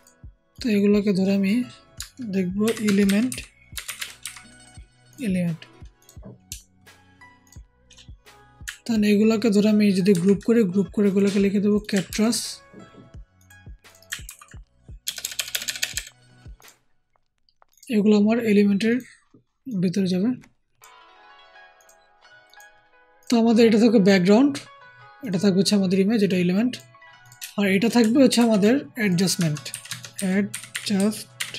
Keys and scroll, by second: 2.5-4.1 typing, 10.0 ctrl+g, 12.0 ctrl+c, 14.2 ctrl+v, 15.0 BackSpace, 15.7 BackSpace, 28.3 ctrl+shift+g, 29.6-31.3 typing.